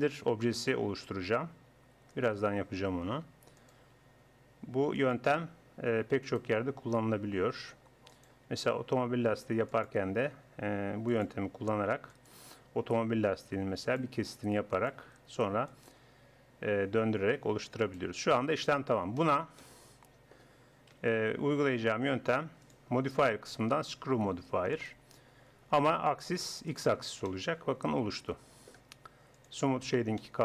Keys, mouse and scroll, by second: 0.8 e, 2.5 e, 3.8 e, 5.2 e, 6.6 e, 8.3 e, 9.9 e, 11.4 e, 12.4 e, 14.0 e, 15.0 e, 16.6 e, 18.2 middle click, 18.6 Tab, 20.9 KP_1, 26.1-28.0 drag, 29.4-30.4 drag.